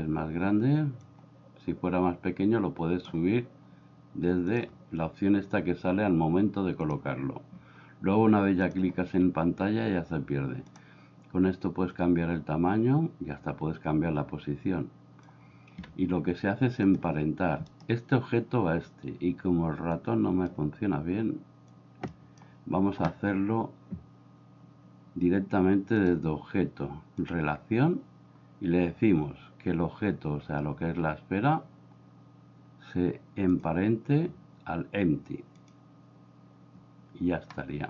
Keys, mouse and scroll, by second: 1.1-3.0 drag, 6.9 click, 10.7 click, 11.9-15.3 drag, 16.9 click, 20.0 click, 21.8 click, 26.1 click, 33.6-35.7 drag.